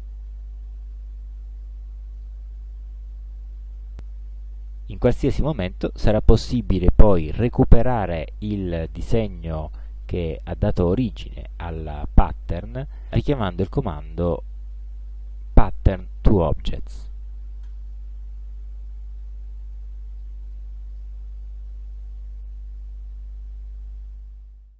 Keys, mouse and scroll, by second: 2.2 click, 7.2 click, 17.7 click, 19.4 click, 21.0 click, 22.9 ctrl+scroll down 2, 23.5 ctrl+scroll up 1.